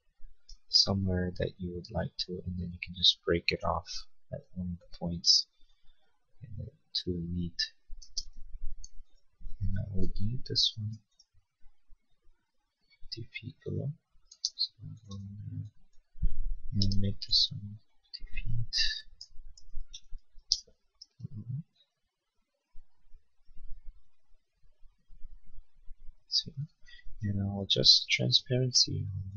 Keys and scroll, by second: 7.9 space, 10.1 m, 14.3 space, 17.0 m, 18.9-20.3 typing, 20.7 Escape, 26.9 b.